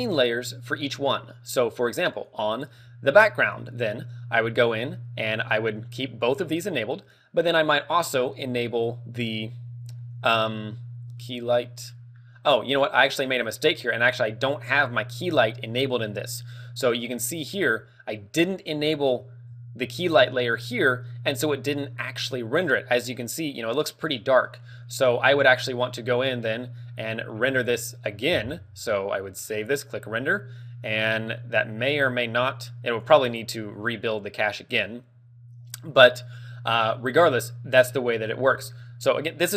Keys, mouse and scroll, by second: 3.7 click, 3.7-4.2 scroll down 5, 10.3 click, 19.0 shift+click.